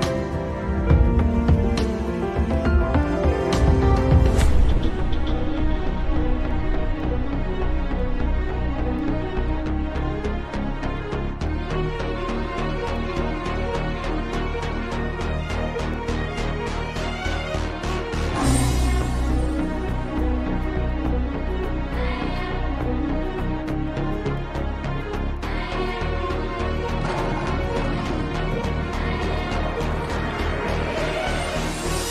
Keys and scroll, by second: 4.8 f, 11.4 shift+F2, 11.8 Escape, 15.9 F3, 17.7 shift+F2, 18.8 F3.